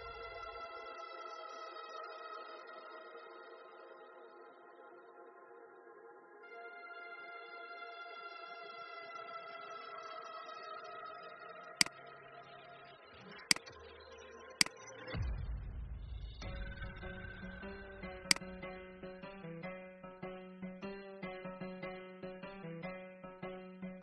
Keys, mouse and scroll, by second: 11.6 click, 15.1-15.7 scroll down 1, 18.1 click, 19.2-19.8 Up, 21.7 Up, 21.9 Up.